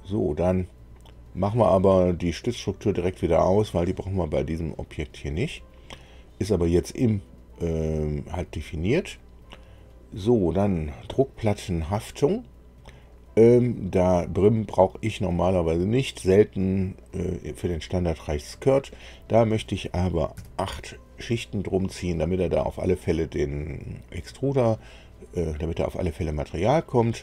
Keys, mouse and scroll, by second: 0.7-1.9 drag, 3.1 click, 14.1 click, 17.0 click, 18.7 click, 20.3 KP_8, 23.6 click.